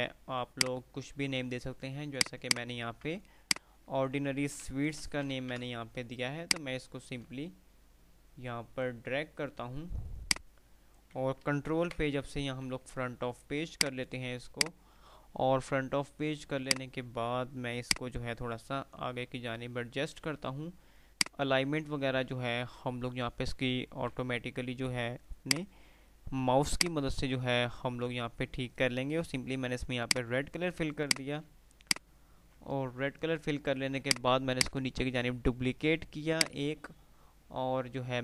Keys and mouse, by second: 0.2 F2, 2.3 click, 3.8-4.5 click, 4.6 ctrl+g, 5.1 Delete, 5.5 ctrl+z, 6.6-9.3 drag, 9.3 F2, 10.2 click, 10.5-11.5 F2, 11.5 typing, 11.9 shift+Page_Up, 12.9 F3, 13.6 F2, 15.1 F2, 15.1 click, 16.8-19.5 drag, 24.5 F3, 25.9-28.5 drag, 31.6 F2, 31.9 click, 32.2 F2, 33.9-37.1 drag, 36.5-38.2 right drag.